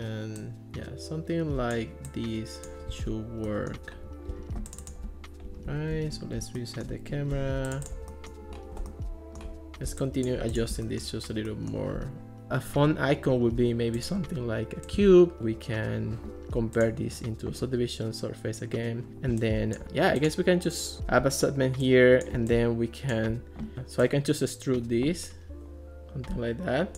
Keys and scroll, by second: 5.9 alt+r, 7.3 Escape.